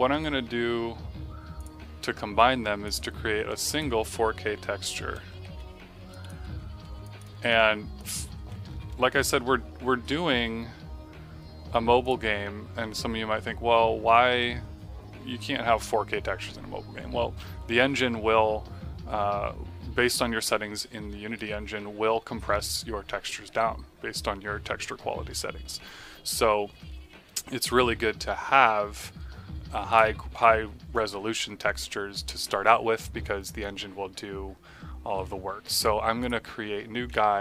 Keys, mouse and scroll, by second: 4.8 KP_4, 5.0 KP_0, 5.3 KP_9, 5.4 KP_6, 6.0 click, 6.8 ctrl+c, 7.0 click, 7.3 Tab, 7.9 click, 8.3 ctrl+v, 8.6 Tab, 11.9 click, 29.8 click, 36.1 click.